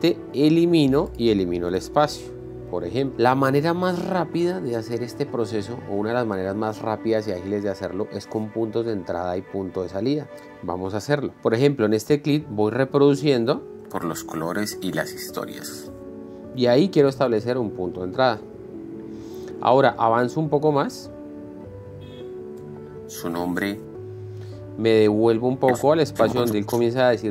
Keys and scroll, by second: 1.0 BackSpace, 14.3 space, 18.4 space, 18.9 i, 21.4 space, 25.6 Left.